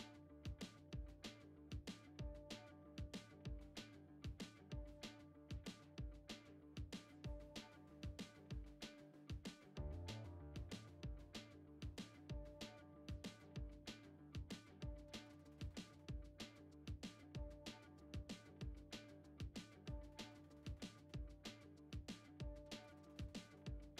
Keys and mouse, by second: 0.6 shift+d, 1.9 middle click, 2.7 s, 3.4 s, 4.8 g, 5.8 g, 6.4 middle click, 6.8 g, 8.1-8.4 middle drag, 8.6 Tab, 9.1 a, 9.6 shift+d, 11.1 g, 11.8 g, 12.5 ctrl+Tab, 13.8 click, 14.2-14.8 middle drag, 15.1 shift+middle click, 15.6 middle click, 16.7 shift+c, 17.6 shift+a, 18.9 s, 20.5-21.4 middle drag, 21.5 g, 22.6-23.5 middle drag, 23.5 g.